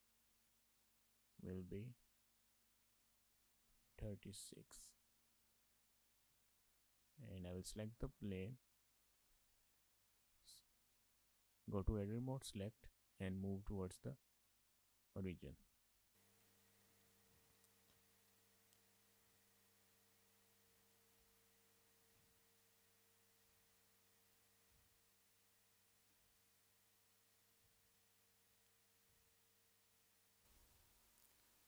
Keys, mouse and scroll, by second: 0.9 click, 3.0 click, 5.2 shift+middle click, 5.4 middle click, 6.1 scroll up 1, 6.2 middle click, 6.4 shift+middle click, 6.8 middle click, 7.5 click, 8.0-8.8 scroll up 2, 8.8 middle click, 9.3 Tab, 10.7 a, 11.1 shift+middle click, 11.3 middle click, 12.0 shift+middle click, 12.2 middle click, 13.2 click, 16.5 middle click, 16.8 scroll up 2, 16.9 shift+middle click, 17.3 scroll up 1, 17.5 shift+middle click, 17.6 middle click, 17.9 shift+middle click, 18.2 middle click, 18.8 click, 21.2 Tab, 21.4 middle click, 21.7 shift+middle click, 21.9 scroll up 3, 22.1 shift+middle click, 22.2 middle click, 23.0 middle click, 24.2 scroll down 3, 24.4 shift+middle click, 24.5 middle click, 24.9 shift+middle click, 25.0 middle click, 25.5-25.9 scroll down 5, 25.9 shift+middle click, 26.2 middle click, 26.5 shift+middle click, 26.8 middle click, 27.4 scroll down 1, 27.5 shift+middle click, 27.6 middle click, 28.3 scroll up 1, 28.4 shift+middle click, 28.5 middle click, 29.4 middle click, 29.8 scroll up 3, 30.0 shift+middle click, 30.1 middle click, 30.6 scroll up 1, 30.9 shift+middle click, 31.4-31.6 scroll up 2.